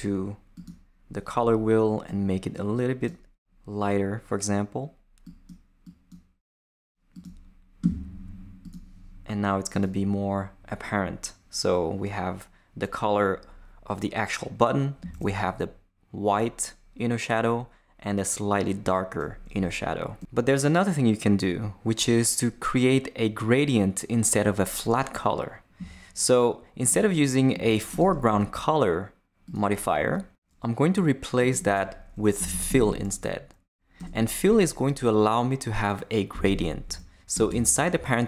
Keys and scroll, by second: 32.1-33.0 typing, 34.0 Return, 36.8 Left, 37.3 Return, 37.9 shift+Return.